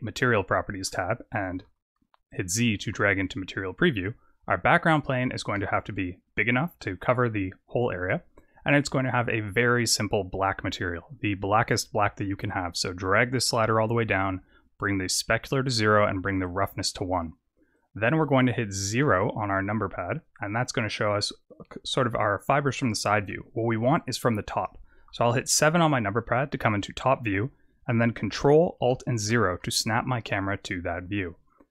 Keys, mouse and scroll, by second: 0.1 click, 1.5 z, 5.8 s, 8.5 click, 10.9 click, 14.8 click, 17.2 click, 17.6 click, 18.9 KP_0, 21.6-22.3 scroll up 5, 22.3-24.7 scroll down 3, 25.3 KP_7, 29.2 ctrl+alt+KP_0.